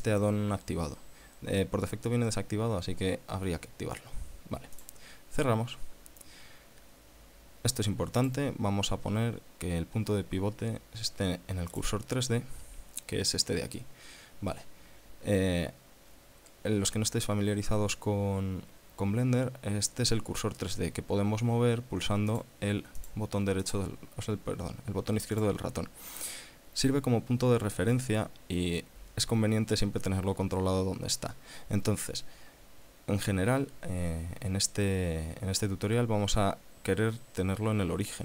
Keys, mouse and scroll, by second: 4.9 click, 8.3 click, 11.9 click, 22.5 click, 23.2 click, 23.8 click, 25.5 click.